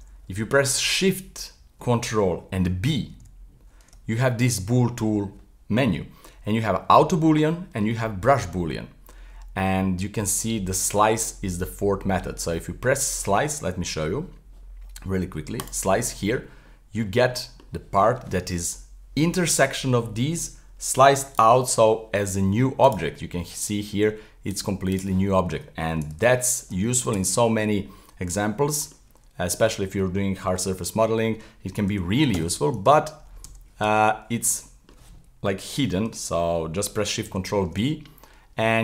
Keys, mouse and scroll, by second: 3.1 ctrl+shift+b, 3.2 ctrl+shift+b, 16.6-20.4 middle drag, 21.3 right click, 21.7 g, 24.5 click, 24.9 click, 26.2 z, 26.7 z, 27.1 z, 28.5-31.9 middle drag, 31.9 g, 33.4 z, 33.8 z, 34.6-37.2 middle drag, 37.2 ctrl+shift+b.